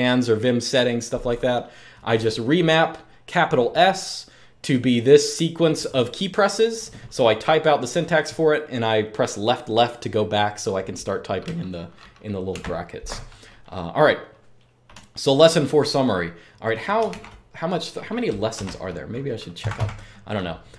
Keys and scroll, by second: 12.2 super+q, 16.8 ctrl+d, 18.3-20.0 typing.